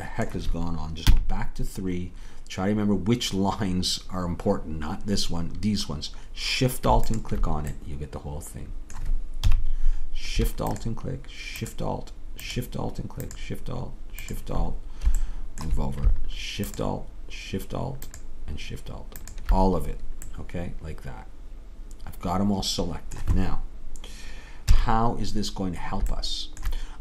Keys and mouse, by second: 1.1 KP_3, 7.1 right click, 7.8 middle click, 8.0 middle click, 8.0 right click, 9.5 KP_3, 14.8 click, 15.4 click, 16.0 middle click, 16.7-19.1 drag, 20.3-22.0 middle drag, 24.7 KP_3.